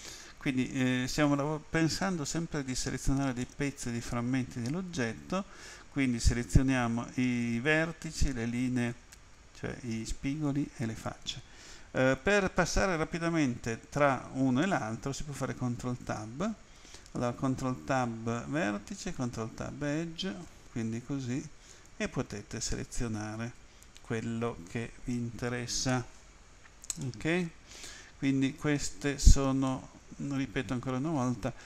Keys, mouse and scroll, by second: 3.4 middle click, 15.6 ctrl+Tab, 19.0 click, 20.5 ctrl+Tab, 21.8 click, 27.1 middle click, 29.7 middle click.